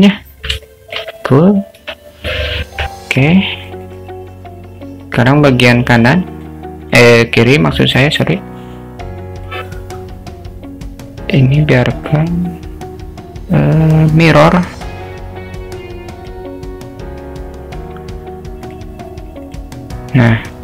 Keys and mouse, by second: 0.7 alt+shift+middle drag, 1.8 Tab, 2.7 Tab, 3.5 middle click, 3.8 click, 6.8 click, 8.4 drag, 11.6-16.4 drag, 18.2 click.